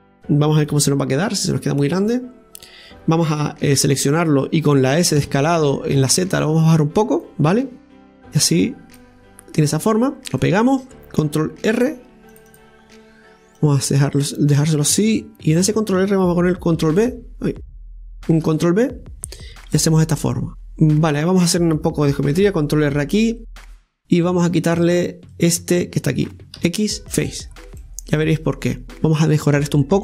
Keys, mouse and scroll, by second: 0.7 KP_1, 2.1-3.8 scroll down 3, 3.8 a, 8.2 click, 9.4-9.8 scroll up 2, 10.4 scroll up 3, 10.4 shift+middle click, 11.8 ctrl+r, 13.6 click, 17.5 ctrl+v, 20.5-22.4 scroll down 1, 24.4 click, 26.6 x, 27.5-27.8 scroll down 1, 27.8-28.8 middle drag, 28.8 KP_1, 29.2 scroll up 1.